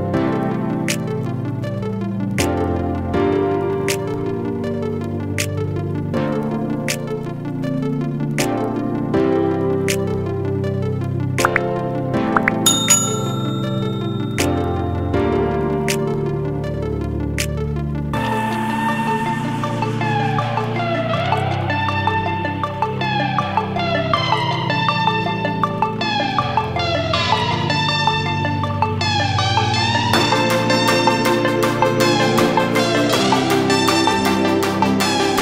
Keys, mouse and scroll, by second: 1.0 click, 3.9 ctrl+j, 4.8 click, 5.8 ctrl+space, 6.7 click, 12.0 ctrl+space, 12.3 ctrl+click, 12.4-13.3 ctrl+space, 13.3 space, 13.3-14.0 click, 13.6 space, 14.5-15.0 ctrl+click, 14.6 ctrl+space, 15.1 click, 18.8 click, 21.7 click, 22.5 Down, 22.8 click, 25.9-26.5 scroll up 1, 26.5 click, 29.5 click, 29.9-30.5 scroll up 2, 30.5 click, 33.5 space, 33.5 click, 33.6 space, 34.5 click, 35.0 Down.